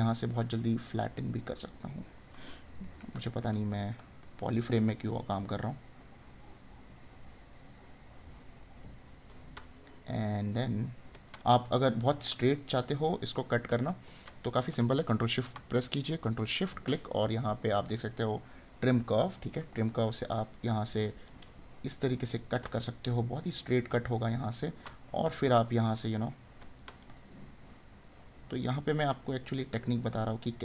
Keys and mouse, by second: 3.8 right click, 9.0 right click, 23.0 right click, 25.2 right click.